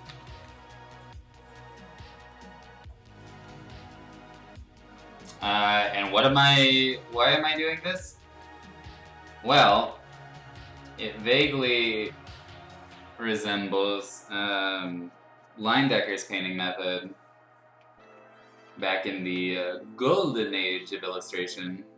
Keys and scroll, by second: 0.0 ctrl+z, 0.3 x, 7.0 x, 7.8 ctrl+z, 9.7 ctrl+z, 16.6 [, 16.8 [, 18.0 ctrl+z, 18.1 l, 18.8 ctrl+z, 19.3 x, 20.7 x, 21.5 ctrl+z.